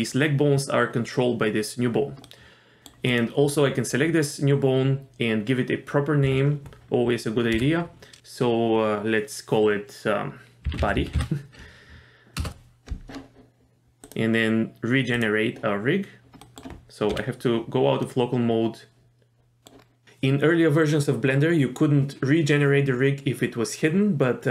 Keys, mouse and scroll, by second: 2.2 middle click, 3.1 click, 6.2 F2, 14.0 click, 15.2 click, 16.4 middle click, 17.1 KP_Divide, 18.0-19.6 middle drag, 19.8 scroll up 1.